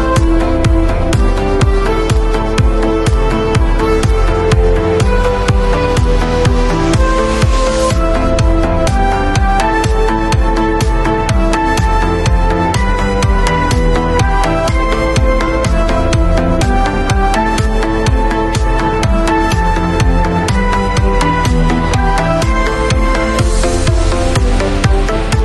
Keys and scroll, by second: 12.7 super+t.